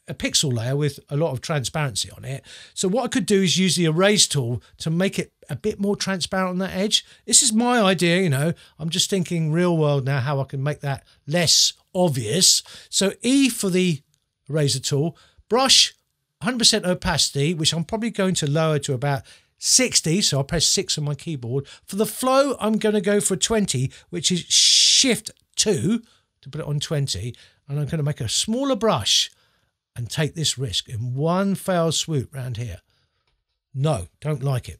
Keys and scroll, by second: 7.8 z, 13.3 e, 19.7 6, 25.6 shift+2, 28.0 [, 34.5 super+z.